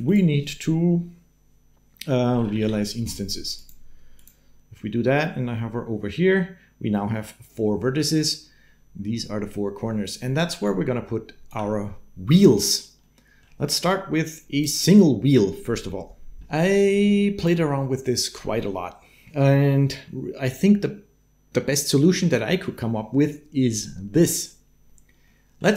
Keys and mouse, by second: 10.4 d, 10.4 click, 12.0 d, 13.0 middle click, 13.7 click, 16.7 click, 25.0 click.